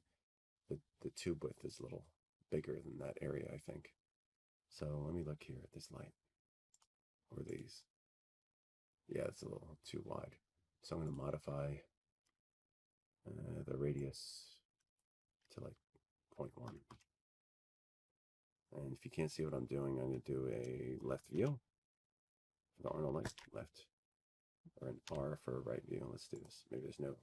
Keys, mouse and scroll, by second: 5.0-7.1 drag, 9.8-12.0 scroll down 12, 12.0-12.3 scroll down 1, 12.6 click, 13.3 click, 16.7 click, 20.6 click, 22.2 click, 22.2 1, 22.4 Tab, 24.7-26.7 scroll, 26.9 scroll.